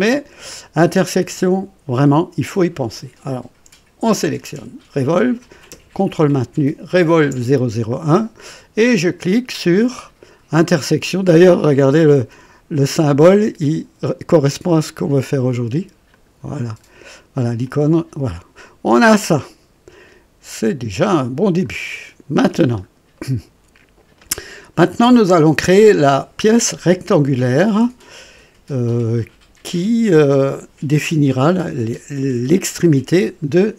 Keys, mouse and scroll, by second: 4.2 click, 7.0 ctrl+click, 16.1 click, 17.6-21.8 drag, 22.1 scroll down 1, 22.5 scroll up 1, 23.1 right click, 24.2 click, 25.1 right click.